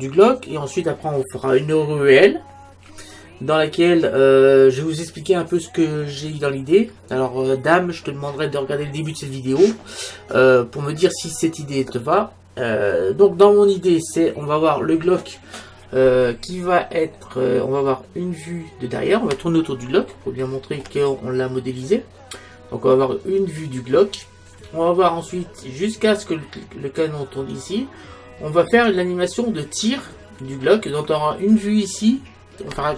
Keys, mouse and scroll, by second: 17.2-19.0 middle drag, 19.1-23.3 middle drag, 25.5-27.9 middle drag.